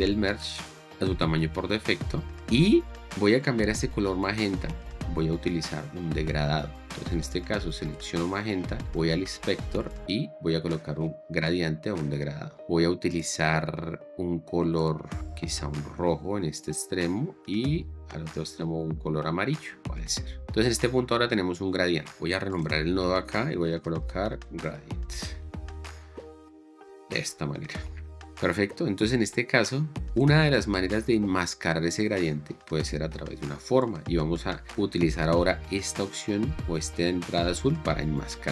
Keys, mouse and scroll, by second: 19.8 click, 20.4 click, 22.9 F2, 23.1-25.4 typing, 26.4 t, 26.6 Return, 30.8 click.